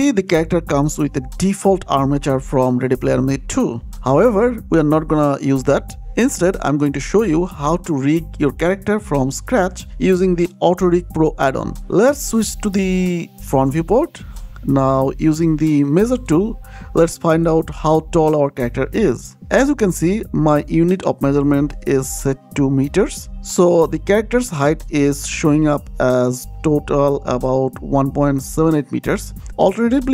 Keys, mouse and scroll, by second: 1.4-2.5 scroll down 1, 2.5 click, 3.1-3.6 scroll down 1, 3.6 click, 4.3 shift+click, 4.7 x, 5.0 click, 5.4 x, 6.4 middle click, 11.3-11.9 scroll down 1, 11.9-13.4 scroll up 1, 13.5 KP_1, 16.0 click, 20.8 click.